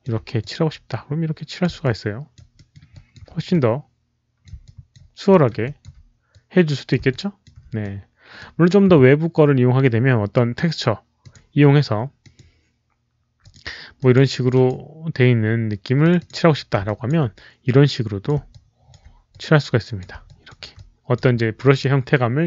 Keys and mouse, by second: 0.3-1.5 alt+drag, 1.7 alt+click, 2.4 alt+middle click, 2.8 alt+click, 3.4 alt+click, 4.3 alt+middle click, 4.6 alt+click, 5.2 alt+middle click, 5.5 alt+click, 6.2 alt+click, 7.1 alt+click, 7.7 alt+click, 11.1 click, 11.2 alt+middle click, 12.1 alt+click, 12.1 alt+middle click, 12.3 alt+middle click, 13.3 click, 13.9 alt+click, 14.4 alt+click, 15.9 alt+click, 16.1 click, 16.8 click, 17.6 alt+click, 18.5 alt+click, 19.2 alt+click, 20.2 alt+click, 20.6 alt+click.